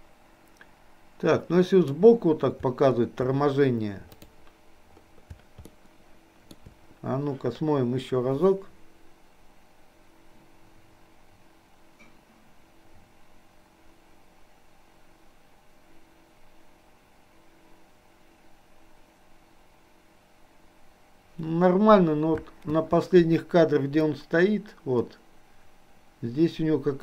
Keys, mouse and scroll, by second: 6.0 shift+middle click, 22.5 space, 24.2-27.0 drag.